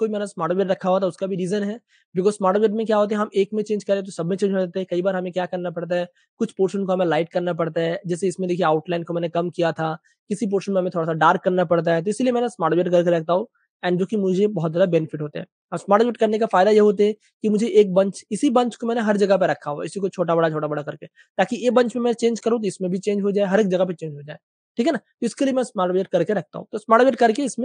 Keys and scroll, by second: 1.3 space, 5.0 space, 7.1 super+space, 10.3 space, 11.9 super+space, 12.0 super+space, 12.4 super+w, 14.3 super+space, 15.9-17.1 typing, 18.2 super+z, 19.7 super+z, 24.7 space, 26.3 typing.